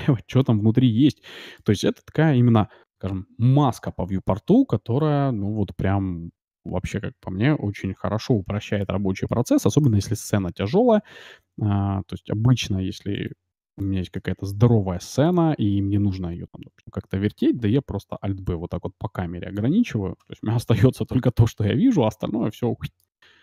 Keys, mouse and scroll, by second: 0.0-2.3 middle drag, 8.2 alt+b, 8.8-10.8 middle drag, 9.8 KP_0, 10.9-11.4 scroll up 1, 11.4-11.9 scroll up 1, 11.9 middle click, 11.9 a, 13.1-15.4 right drag, 14.4 s, 15.9-17.9 middle drag, 18.1 alt+b, 22.3-23.4 middle drag.